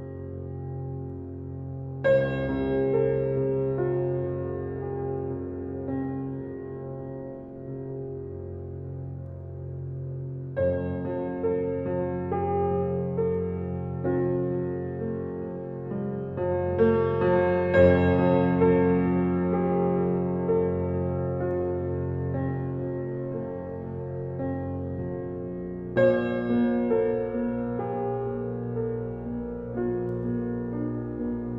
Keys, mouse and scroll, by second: 3.2 Escape, 4.1 alt+click, 4.7 alt+middle click, 5.6 alt+right click, 6.1 alt+middle click, 7.1 alt+right click, 7.6 alt+middle click, 8.0 alt+right click, 8.4 middle click, 9.0 click, 9.9 click, 26.0-27.3 scroll down 1, 27.5 scroll up 1, 27.6 Escape, 28.6 click, 29.1-30.8 alt+middle drag, 30.8 click.